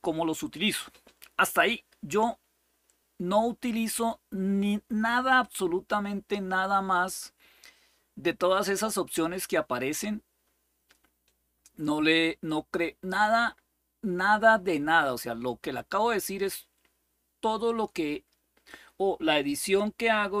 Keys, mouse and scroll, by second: 0.0-0.8 scroll up 2, 0.8-2.9 scroll up 1, 2.9-3.6 scroll up 1, 3.6-4.5 scroll up 1, 4.5-5.2 scroll up 1, 5.2-7.4 scroll up 1, 7.4-9.1 scroll up 1, 9.1-11.4 scroll up 1, 11.4-12.8 scroll up 1, 12.8-15.3 scroll up 1, 17.0-20.4 scroll up 3.